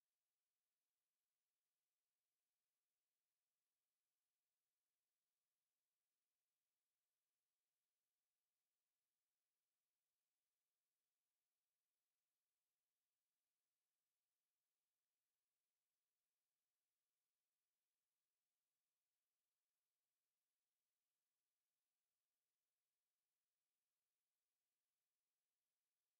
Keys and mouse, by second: 0.9 click, 1.3 alt+click, 2.2 shift+click, 8.1 click, 8.4 alt+click, 9.0 alt+right click, 9.4 alt+click, 11.9 alt+middle click, 13.6 alt+click, 19.5 click, 24.2 alt+click, 25.2 alt+middle click, 26.0 alt+click.